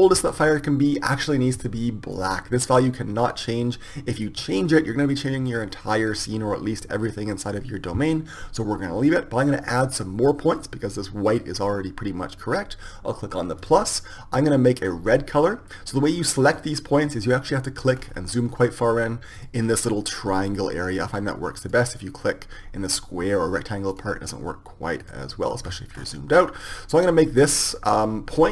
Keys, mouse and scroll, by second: 1.9-3.8 drag, 10.8-12.8 drag, 13.5-15.5 drag, 16.4-28.5 drag.